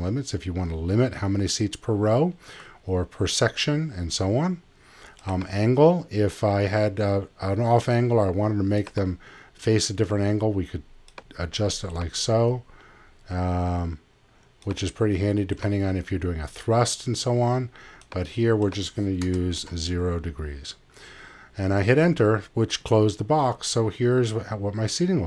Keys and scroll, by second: 19.2 0, 19.5 Return.